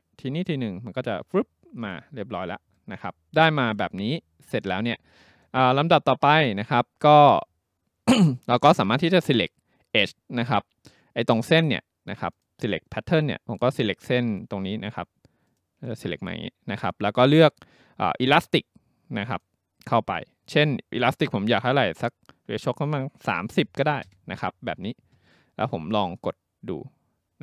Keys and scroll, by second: 23.3-24.3 typing.